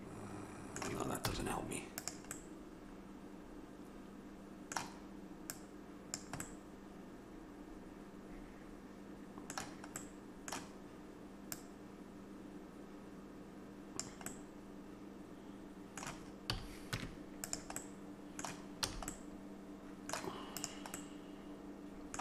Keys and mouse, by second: 1.3 z, 2.4-3.8 middle drag, 5.5-7.4 drag, 7.4 middle click, 10.0-11.6 middle drag, 11.6-13.4 drag, 14.3-16.1 middle drag, 16.5 a, 17.0 Tab, 18.0-19.8 middle drag, 18.9 a, 20.6-22.2 drag.